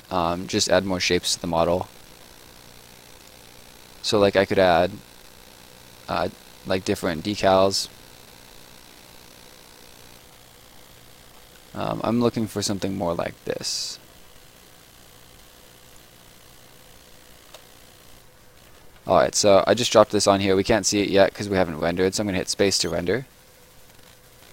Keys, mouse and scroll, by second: 1.5-1.9 scroll down 1, 3.1 click, 6.1-8.2 scroll down 1, 8.9-10.1 scroll down 1, 10.1-12.7 scroll up 1, 12.7 click, 15.8 click, 18.0 Escape, 19.0 right click, 22.4 space, 23.8 right click.